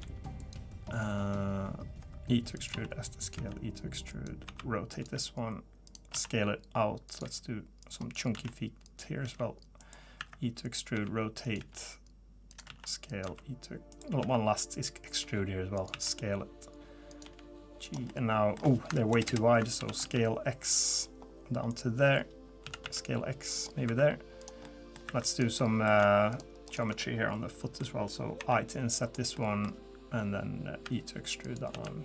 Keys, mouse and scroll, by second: 0.0 g, 2.0 e, 2.7 s, 3.3 e, 4.5 r, 5.0 g, 6.1 s, 7.2 g, 8.3-11.6 typing, 12.7-15.9 typing, 17.2 g, 18.1 middle click, 19.1 ctrl+KP_Add, 19.3 ctrl+KP_Add, 19.8 s, 22.6 s, 23.9 2, 24.4 click, 24.6 middle click, 25.1 3, 25.3 click, 25.6 middle click, 26.3 shift+click, 26.7 shift+click, 27.0 middle click, 28.4 i, 29.3 middle click, 30.8 e, 31.7 s.